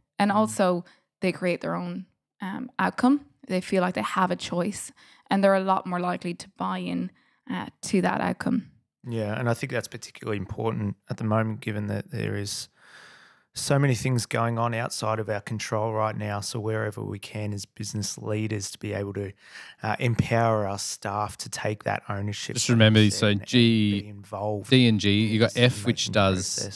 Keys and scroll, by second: 13.1 f, 14.3 g, 16.7 d, 19.2 Delete, 21.5 g, 26.4 f.